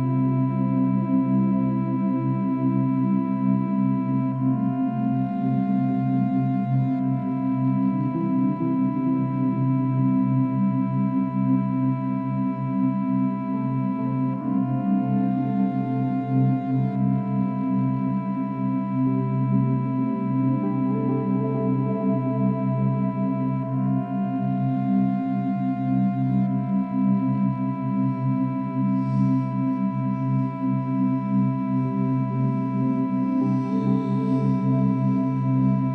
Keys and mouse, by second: 4.6-5.4 drag, 5.5-8.0 drag, 8.1-9.0 shift+drag, 9.6 shift+click, 11.1 right click, 12.1 click, 13.0 typing, 13.2 click, 13.7-14.6 drag, 15.5 ctrl+i, 16.6 Return, 17.9-18.9 drag, 19.2-21.5 drag, 22.2 click, 22.2 space, 24.2 space, 24.6 click, 24.8 space, 26.0 space, 27.0 ctrl+s, 32.4-35.9 drag.